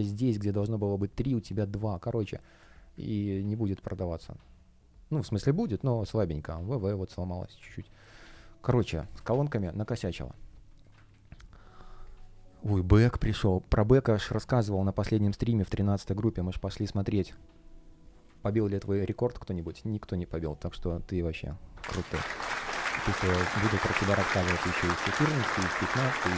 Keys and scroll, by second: 1.4 space, 7.9 super+z, 9.0 space, 11.0 super+w.